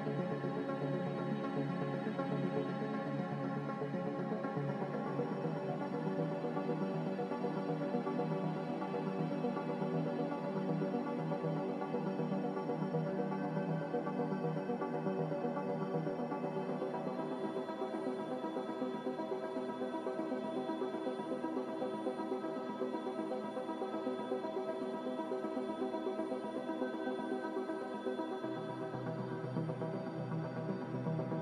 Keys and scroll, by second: 15.8-16.8 typing.